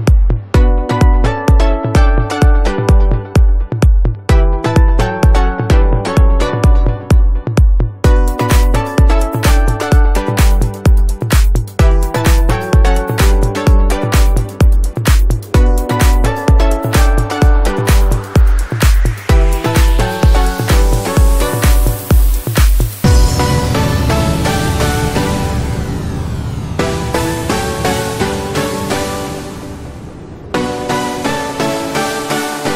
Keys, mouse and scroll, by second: 1.1 click, 6.5-9.5 typing, 9.6 right click, 10.7 click, 11.7-12.5 typing, 13.4 click, 16.9-18.7 typing, 19.4-28.1 drag, 27.8 space, 28.2 ctrl+click, 29.6-31.0 typing, 31.3-32.7 drag.